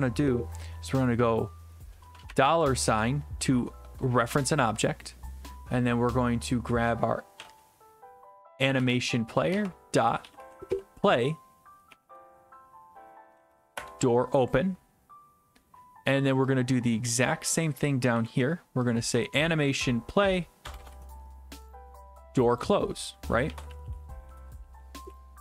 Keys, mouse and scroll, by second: 2.3 typing, 7.1-7.9 typing, 8.8 Return, 9.7-11.2 typing, 13.4 Down, 13.8 Return, 17.8 click, 18.2 ctrl+c, 19.8 click, 20.6 BackSpace, 20.8 BackSpace, 20.9 ctrl+v, 22.5 click, 22.6 click, 23.3-25.3 typing.